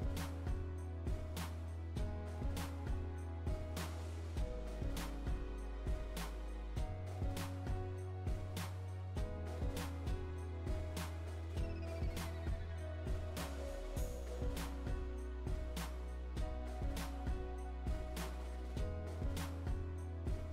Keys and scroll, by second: 5.1 Return, 15.0 Delete.